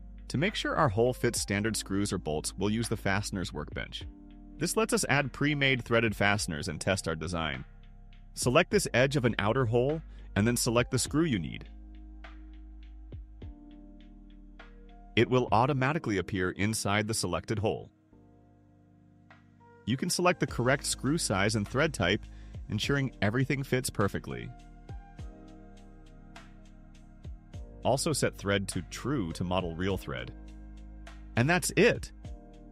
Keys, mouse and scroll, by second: 5.1 click, 8.1 click, 15.4 click, 20.7 click, 23.2 click, 23.9 click, 25.2 click, 27.6 click, 28.6 click, 29.4 click, 30.0 click, 32.3 click.